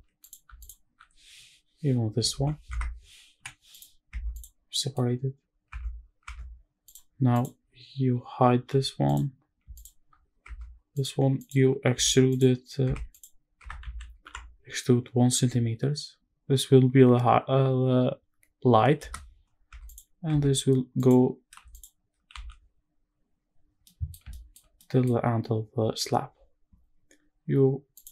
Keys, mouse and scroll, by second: 0.3 alt+click, 2.0 shift+d, 2.4 Escape, 3.1 p, 3.8 Tab, 4.0 click, 4.3 scroll down 1, 4.4 middle click, 4.8-5.4 scroll up 1, 5.4 Tab, 5.7 scroll down 1, 5.9 Tab, 6.6 click, 7.0 click, 7.4 scroll up 1, 7.6-8.4 scroll down 1, 8.4 h, 8.8 click, 9.4 shift+click, 10.1 Tab, 10.7 click, 11.6 a, 12.0 click, 12.6 Tab, 12.8 click, 13.3 Tab, 13.5 a, 13.9 e, 15.0 KP_1, 18.7 KP_Enter, 19.4 Tab, 19.6 click, 20.0 Tab, 20.7 click, 21.4 alt+click, 22.0 a, 22.4-22.9 scroll down 2, 22.9-23.5 scroll up 1, 23.5 middle click, 24.0 shift+middle click, 24.4 scroll up 1, 24.5 middle click, 27.7-28.1 drag.